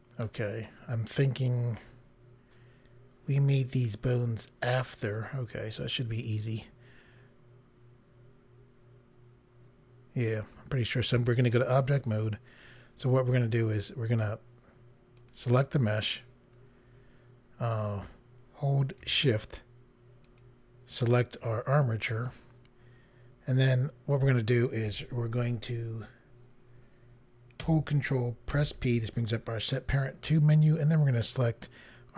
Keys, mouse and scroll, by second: 6.3 click, 11.5 click, 12.4 scroll down 1, 15.2 click, 20.3 shift+click, 28.5 ctrl+p.